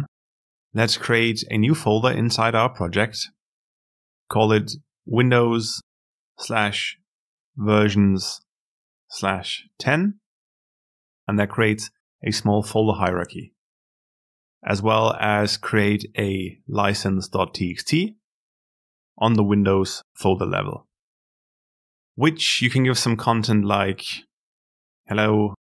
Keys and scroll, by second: 14.5 alt+Insert.